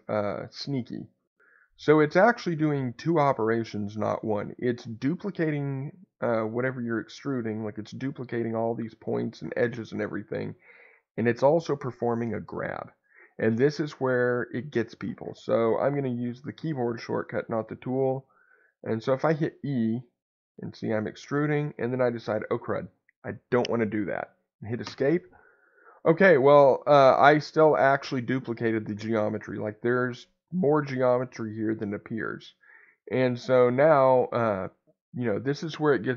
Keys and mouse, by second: 24.9 Escape.